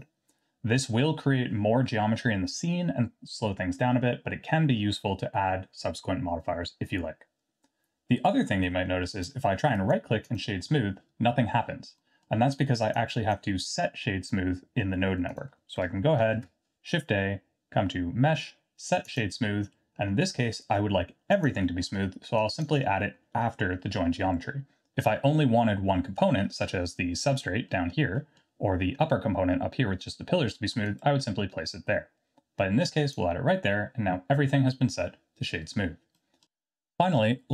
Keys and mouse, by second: 12.1 middle click, 13.1 click, 15.3 click, 16.3 shift+a, 21.7 middle click, 22.3 click, 27.6 middle click, 28.2 middle click, 30.8-33.1 drag, 36.1 middle drag.